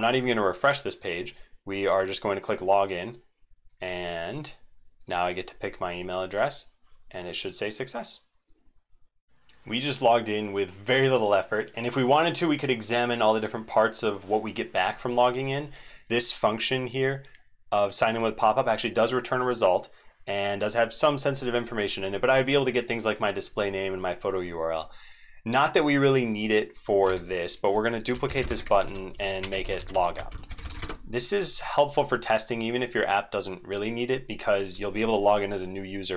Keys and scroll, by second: 9.1 super+1, 9.1 ctrl+Tab, 9.1 ctrl+c, 27.0 ctrl+d, 28.8 ctrl+Right, 29.6 ctrl+shift+Right, 29.7 ctrl+shift+Right, 29.9 ctrl+shift+Right.